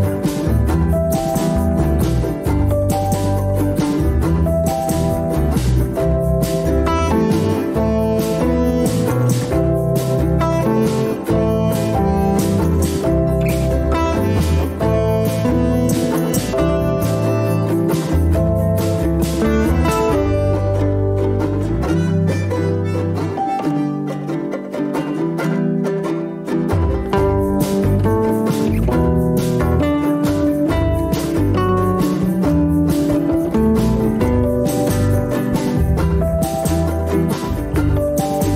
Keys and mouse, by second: 6.0 alt+z, 6.4-7.9 middle drag, 9.9-11.4 drag, 11.8 middle click, 13.1 Tab, 13.1-14.1 middle drag, 16.2 ctrl+r, 22.5 middle click, 24.8 ctrl+r, 28.5-29.0 shift+middle drag, 30.2-31.1 shift+middle drag, 35.0 ctrl+r.